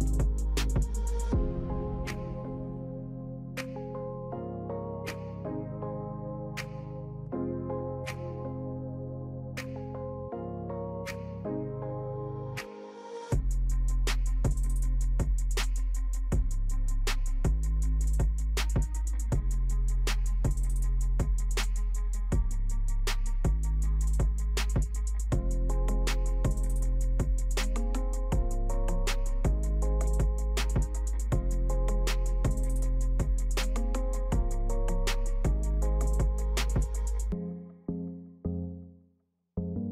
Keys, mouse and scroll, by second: 2.7 alt+click, 21.7-31.0 alt+shift+drag.